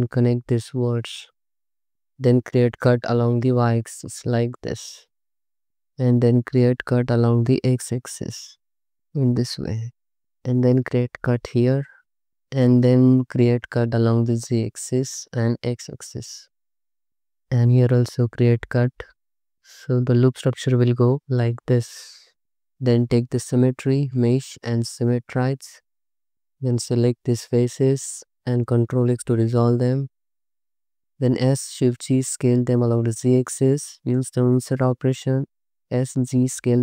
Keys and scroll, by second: 0.4 space, 1.3 space, 2.8 y, 4.8 space, 6.6 x, 7.7 space, 11.5 space, 12.8-15.7 typing, 17.5-20.1 typing, 22.4 a, 26.0-26.9 typing, 28.9 ctrl+x, 31.2 s, 31.8 shift+z, 34.2 i, 35.5 s, 35.9 z.